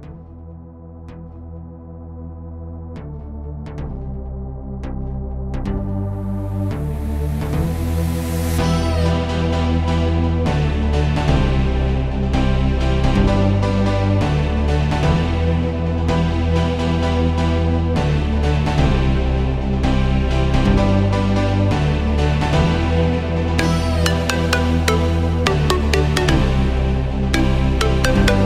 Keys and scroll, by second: 10.0 super+v, 21.4 Escape, 24.8 Escape.